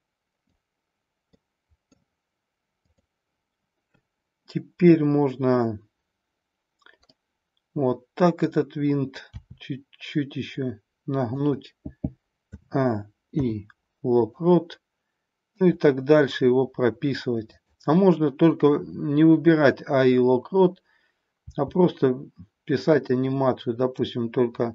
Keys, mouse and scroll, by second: 1.3-1.9 middle drag, 2.8-5.8 drag, 7.0-8.4 middle drag, 9.3 r, 11.4 click, 12.4 a, 13.3 i, 15.5 click, 17.5-20.6 drag, 21.4 r, 23.4-24.7 middle drag.